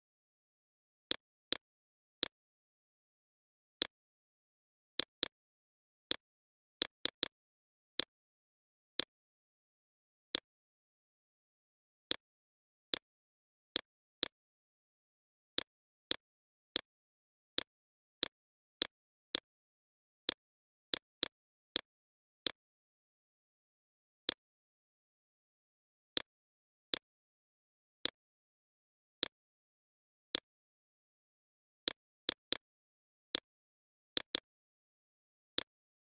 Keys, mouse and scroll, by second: 1.6 right click, 2.9 click, 3.4 right click, 3.8-6.2 drag, 6.4 right click, 6.7 click, 8.9-13.3 drag, 13.3 right click, 15.7 click, 18.4 Left, 18.6 Left, 19.6 click, 24.6 shift+click, 25.9 right click, 26.6-30.4 drag, 30.9 Left, 31.0 Left, 31.3 Left, 32.5 ctrl+z, 33.4-34.4 drag, 34.4 right click, 35.1 click.